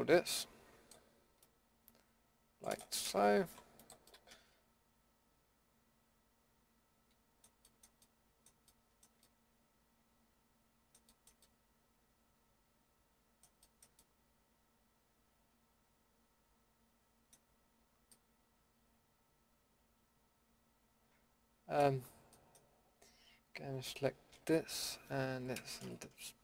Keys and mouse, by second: 3.5 Delete, 4.2 middle drag, 7.6-11.5 middle drag, 12.9-13.4 middle drag, 13.6 middle drag, 14.8 middle drag, 15.6 middle click, 17.5-18.1 middle drag, 18.2 middle click, 19.7 middle click, 24.3 l, 25.0 l.